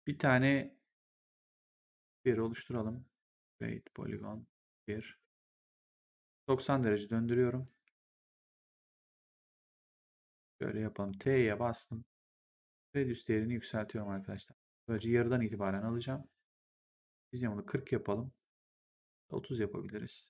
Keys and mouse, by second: 2.4 click, 4.5 click, 5.3 e, 6.1 click, 7.8 w, 8.7 click, 10.9 t, 12.6 click, 16.6 click, 18.7 click.